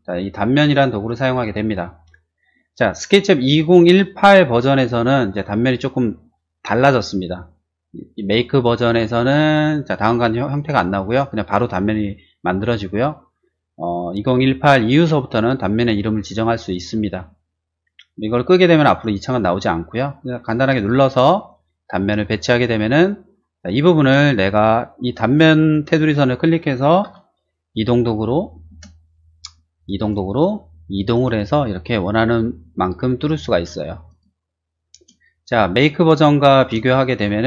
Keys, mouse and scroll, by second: 1.0 shift+click, 1.6 middle click, 20.7 click, 22.1 click, 22.7 middle click, 22.8 scroll down 1, 23.6 middle click, 25.8 click, 27.0 m, 28.6 space, 30.0 click, 31.1 click, 34.0 click, 34.9 space, 36.1 click, 36.9 shift+middle click, 37.3 shift+middle click.